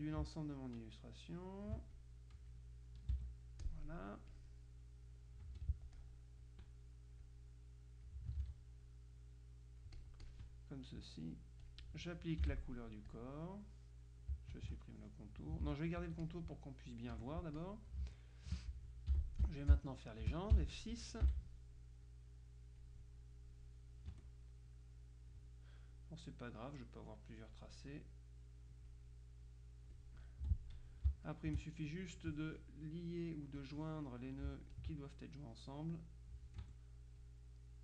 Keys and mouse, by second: 0.6-2.2 ctrl+drag, 3.1 click, 3.2 KP_5, 3.8 click, 4.4 click, 5.5 F2, 5.8 click, 7.4-8.7 drag, 8.5 ctrl+z, 9.0-10.9 ctrl+drag, 11.8 click, 12.6 F7, 13.2 click, 14.6 shift+click, 15.8 ctrl+z, 16.3 ctrl+click, 17.2 F1, 17.7 click, 18.2 space, 20.4 space, 21.4 F6, 22.2-23.8 drag, 24.2 Escape, 24.8-25.9 drag, 27.1-28.1 drag, 30.5 F2, 31.4 shift+click, 32.2 click, 33.6-34.7 drag, 34.8 ctrl+click, 36.7 F1, 37.2-37.8 drag.